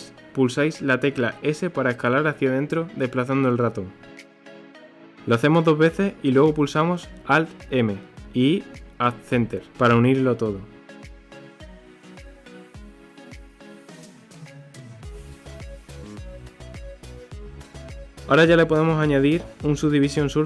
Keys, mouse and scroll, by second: 7.4 alt+m, 10.7 click, 11.5 click, 12.1 click, 12.8 click, 13.8-14.4 middle drag, 14.4 Tab, 14.8 3, 14.9 click, 15.3 Delete, 16.7 click, 16.9 click, 17.4 scroll down 2, 17.6 KP_1, 18.1 Tab, 18.7 ctrl+2, 19.2 scroll up 1, 20.0 Tab.